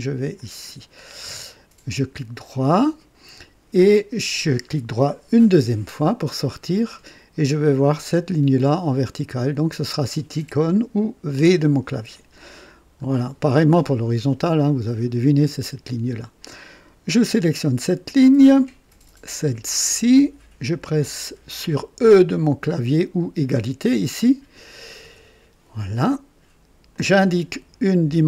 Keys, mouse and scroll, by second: 0.3 click, 2.1 right click, 5.0 right click, 8.1 click, 11.3 v, 12.4 scroll up 1, 13.0 right click, 17.1 click, 20.0 click, 25.0 e, 26.9 click.